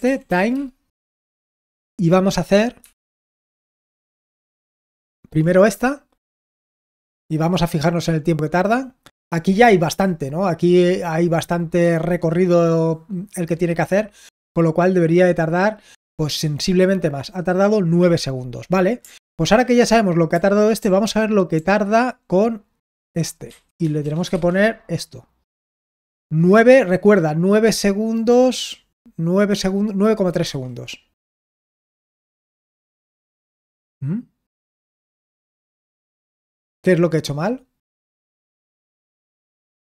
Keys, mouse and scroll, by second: 0.0-0.7 typing, 1.5 ctrl+p, 2.7 ctrl+p, 3.7 ctrl+p, 6.7 Return, 19.2 ctrl+p, 20.3 ctrl+p, 20.8 ctrl+p, 21.5 ctrl+p, 30.3 Return.